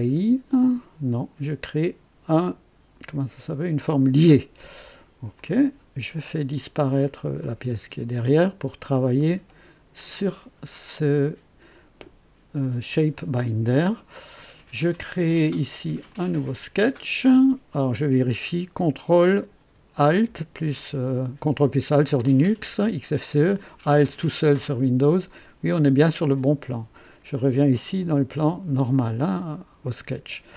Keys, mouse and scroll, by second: 3.5 click, 5.3 click, 7.4 click, 7.7 space, 9.1 click, 16.0 click, 23.2-26.7 ctrl+drag, 28.2 click, 29.4 scroll up 1, 29.8-30.5 right drag.